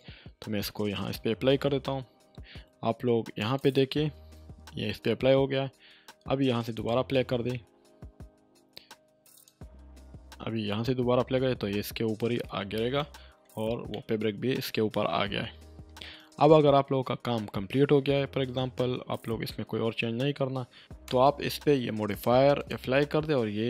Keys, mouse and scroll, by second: 3.4 click, 6.7 click, 9.3 click, 12.9 click, 13.0-13.6 shift+middle drag, 17.3-18.1 scroll up 1, 21.0 space, 22.6 click.